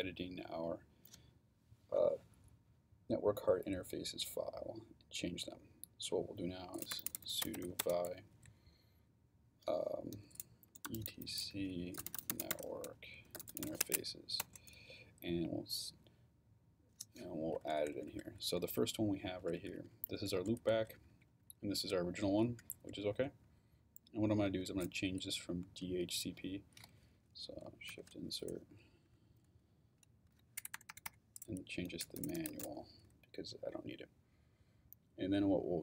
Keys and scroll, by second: 6.7-8.1 typing, 10.1-14.1 typing, 14.4 Return, 17.5 Down, 19.4 Up, 20.6 Down, 22.3 Up, 22.7 Down, 23.4 Right, 24.5 Left, 27.9 shift+|, 29.0 shift+Right, 30.6 BackSpace, 31.6-33.1 typing.